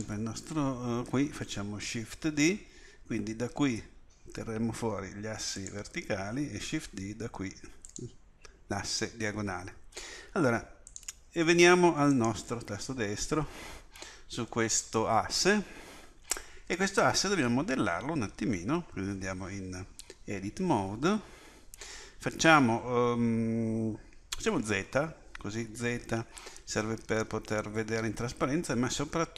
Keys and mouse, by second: 2.2 shift+d, 6.9 shift+d, 10.9-13.3 drag, 13.3-19.2 right drag, 19.2 Tab, 24.7 z.